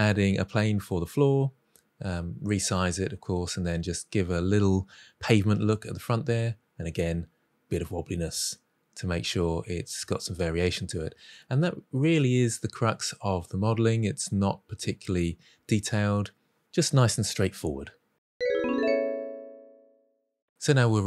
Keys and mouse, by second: 0.0-2.7 typing, 0.1 Tab, 1.5 drag, 2.5 click, 3.0 middle click, 3.3 middle click, 3.5 shift+middle click, 3.7 click, 3.9 e, 3.9 z, 5.2 middle click, 5.4 drag, 5.6 g, 5.8 y, 5.9 middle drag, 6.3 ctrl+z, 6.5 ctrl+b, 6.8 shift+middle click, 7.4 Delete, 7.7 middle click, 8.1-11.2 typing, 9.1 ctrl+z, 9.7 click, 9.8 middle click, 10.4 drag, 10.6 middle drag, 10.9 click, 11.5 middle click, 11.9 middle click, 12.2 middle click, 12.3 click, 12.4 g, 12.8 click, 13.0 r, 13.2 middle click, 13.5 click, 13.6 g, 13.7 drag, 13.9 middle click, 14.1 click, 14.2 g, 14.4 middle click, 14.5 Tab, 14.6-15.2 middle drag, 15.4 middle click, 15.5 Tab, 15.6 middle click, 16.4 ctrl+shift+b, 16.8 middle click, 16.9 click, 17.4 j, 17.5 Tab, 17.6 middle drag, 17.9 middle drag, 18.1 shift+middle click.